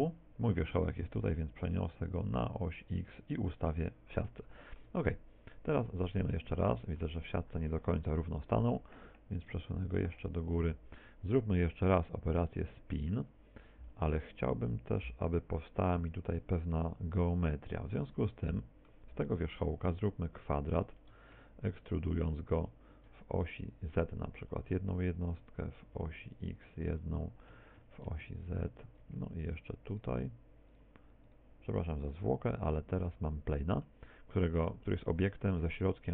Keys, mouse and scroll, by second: 0.8 g, 3.2 ctrl+click, 3.2 shift+s, 4.4 shift+middle click, 6.2 middle click, 8.1 KP_7, 9.4 click, 16.4 middle click, 18.5 middle click, 20.5 e, 25.4 ctrl+click, 25.4 e, 27.6 ctrl+click, 28.8 ctrl+click, 29.5 shift+right click, 30.0 shift+right click, 32.3 f, 33.0 middle click, 34.2 middle click, 35.2 Tab, 35.6 r.